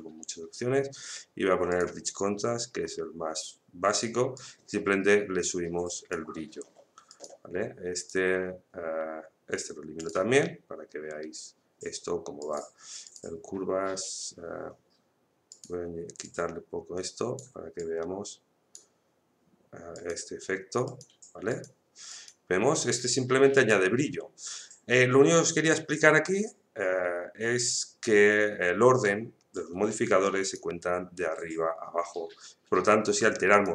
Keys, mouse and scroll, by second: 4.3-7.1 drag, 12.4 click, 15.5-19.9 drag, 30.4 click, 33.5 click.